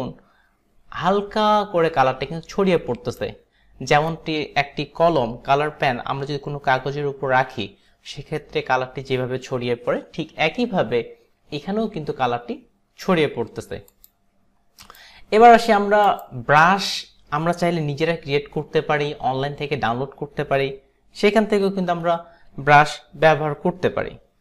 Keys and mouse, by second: 14.0 click, 14.9 click, 16.1 click, 22.0 Delete, 23.4 Delete.